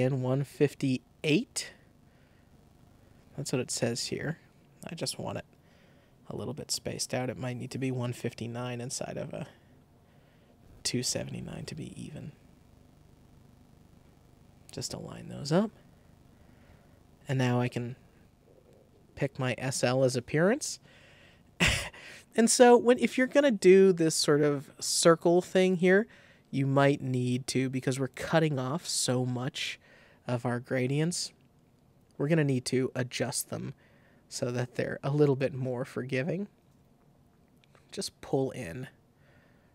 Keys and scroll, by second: 8.6 Up, 30.8 Home, 30.9 ⟲.